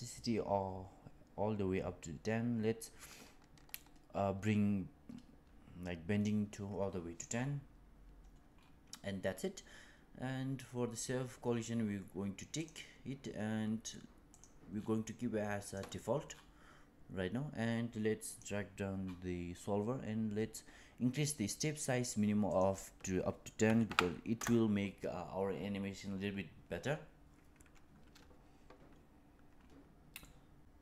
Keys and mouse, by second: 3.6-6.1 drag, 12.5 click, 14.2 click, 15.6 click, 18.2 click, 22.4-28.0 drag, 30.1-30.6 middle drag.